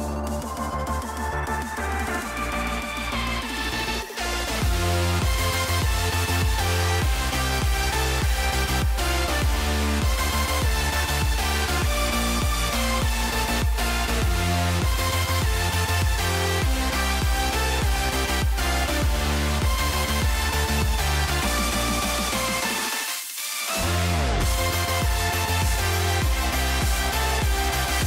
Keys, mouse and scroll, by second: 2.5 click, 3.2 click, 5.0-6.4 drag, 7.1 shift+middle click, 8.2-9.5 drag, 10.4 shift+middle click, 12.0 click, 14.9 click, 18.4 ctrl+s, 22.2 click, 23.4-25.7 drag, 25.8 click.